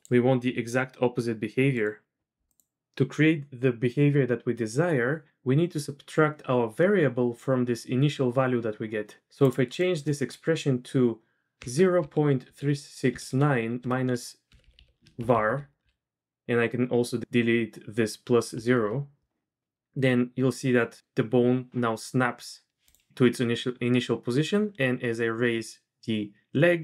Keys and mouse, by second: 0.4 r, 2.4 click, 14.6 Right, 14.7 Right, 15.3 ctrl+shift+r, 24.5 r, 25.6 typing.